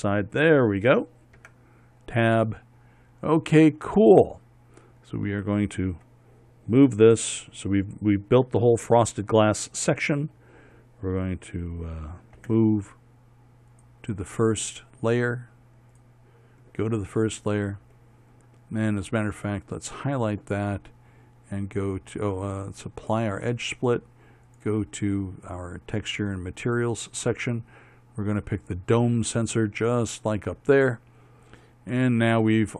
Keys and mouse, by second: 2.0 Tab, 13.0 m, 17.8 click, 18.3 middle click, 18.7 click, 19.1 middle click, 20.3-21.5 right drag, 30.4-32.0 middle drag, 32.1 middle click.